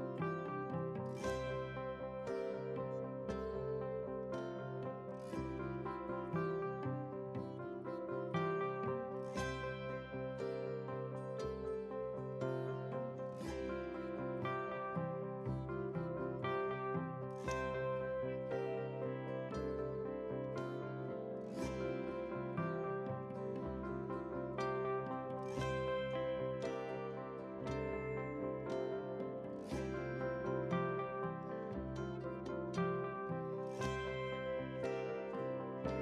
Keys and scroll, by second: 27.4 ctrl+c, 28.2 ctrl+v.